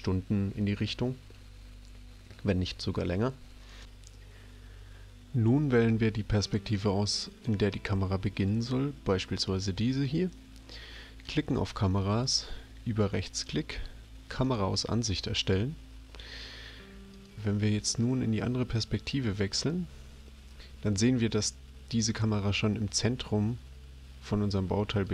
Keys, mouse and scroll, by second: 3.7 click, 7.3 click, 12.0 right click, 19.2 click, 24.9 click.